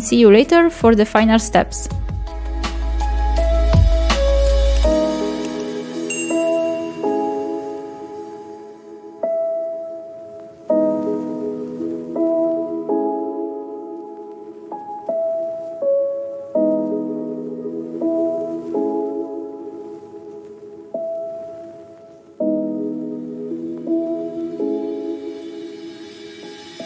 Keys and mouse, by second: 5.0 middle click, 5.2 shift+middle click, 5.5 shift+middle click, 6.5 click, 8.7 click, 9.5 shift+middle drag, 10.1 shift+middle click, 10.4 KP_0, 11.1 click, 12.1 middle click, 12.2 shift+middle click, 12.6 shift+right click, 12.9 shift+a, 13.8 ctrl+z, 13.8 click, 14.6 Tab, 14.9 shift+middle click, 15.6 click, 16.3 click, 16.9 click, 17.9 ctrl+a, 18.3 middle click, 18.6 shift+middle click, 18.9 ctrl+click, 19.5 ctrl+click, 19.8 middle drag, 20.1 shift+middle drag, 20.5 KP_7, 20.7 click, 21.0 KP_Decimal, 21.3 click, 21.8-23.0 drag, 23.2 middle drag, 23.7 middle click, 24.6 shift+d, 25.1 click, 25.4-26.8 drag.